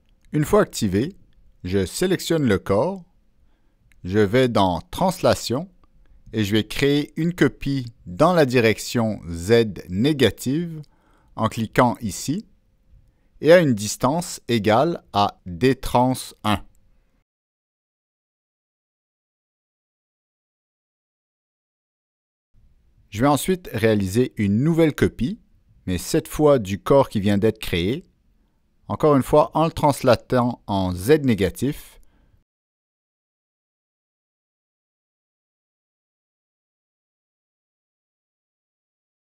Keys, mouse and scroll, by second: 0.3 click, 3.4 click, 13.0 click, 14.5 click, 19.3 click, 20.3 click, 21.8 click, 23.8 click, 27.5 click, 28.9 click, 30.1 click, 30.9 click, 34.3 click, 37.2 click.